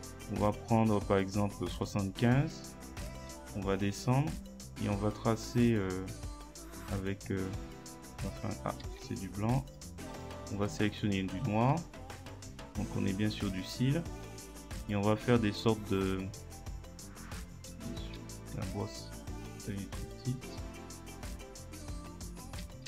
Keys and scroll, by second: 8.8 ctrl+z, 17.7 ctrl+z.